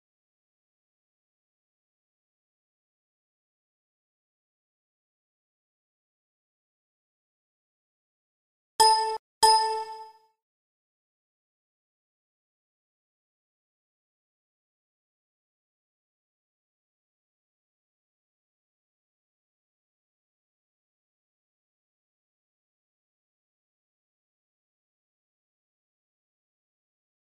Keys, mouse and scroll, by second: 0.9-2.8 middle drag, 5.4-7.3 drag, 10.2-11.3 middle drag, 10.6 Escape, 12.5 shift+a, 14.8 shift+s, 16.0 shift+a, 19.0 KP_1, 21.0-22.6 drag, 23.3 s.